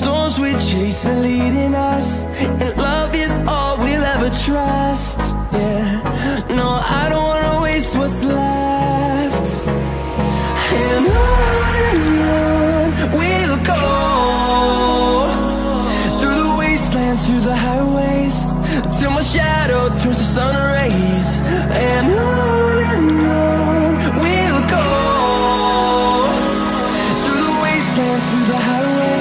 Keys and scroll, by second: 5.9 ctrl+t, 16.3 ctrl+t, 17.6 Return, 19.3 ctrl+t, 25.5 Return.